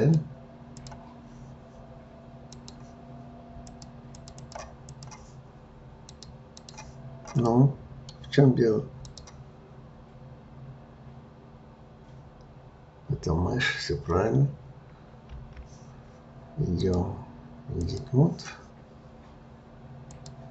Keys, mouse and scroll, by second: 0.7 click, 2.4 click, 3.6 click, 4.1 click, 4.4 click, 4.8 click, 6.0-7.5 drag, 7.5-9.0 middle drag, 9.0-12.2 drag, 15.3 f, 16.7-19.8 drag, 20.0 click.